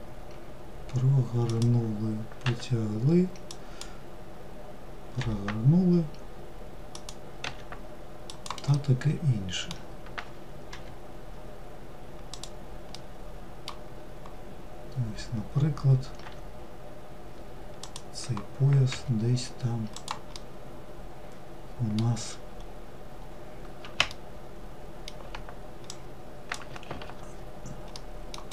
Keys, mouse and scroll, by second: 8.3-10.3 middle drag, 10.3 g, 12.5-13.6 middle drag, 13.6-15.8 scroll down 2, 15.8 e, 19.9-22.1 middle drag, 22.1-23.7 scroll up 2, 23.7-25.5 shift+middle drag, 25.5 click, 27.5-28.1 middle drag, 28.1 click.